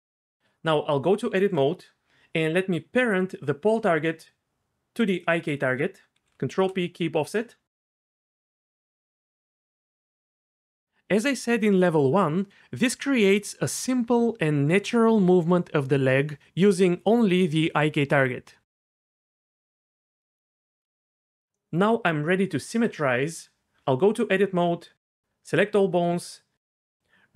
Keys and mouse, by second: 0.0 Tab, 0.7 Tab, 6.1 ctrl+p, 8.0 Tab, 9.3 click, 9.4 r, 9.6 r, 10.9 r, 11.1 r, 14.9 r, 14.9 g, 15.5 r, 18.3 g, 23.8 Tab, 25.5 a.